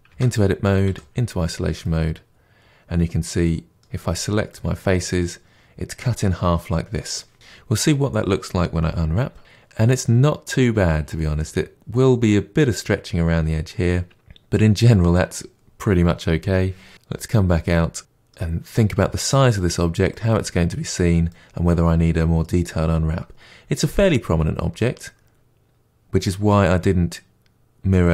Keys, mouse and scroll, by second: 0.1 Tab, 0.8 KP_Divide, 1.7-3.7 middle drag, 3.9 a, 4.5-9.4 middle drag, 9.4 u, 16.9 KP_Divide, 17.5-18.0 scroll down 2, 18.0-28.1 middle drag.